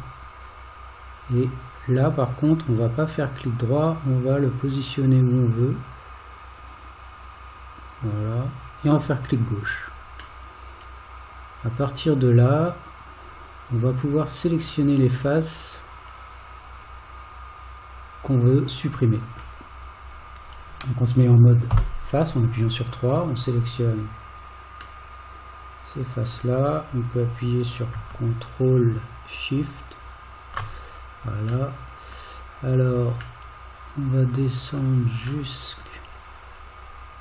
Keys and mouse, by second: 10.5-19.4 middle drag, 21.7 3, 23.3 click, 25.0-26.4 middle drag, 29.9 ctrl+shift+click, 31.7 middle click, 33.5-34.8 middle drag, 35.7 middle click.